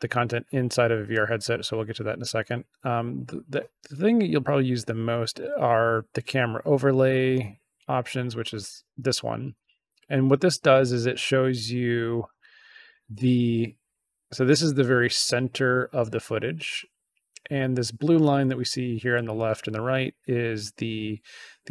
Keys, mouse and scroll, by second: 8.2 click, 10.8 click.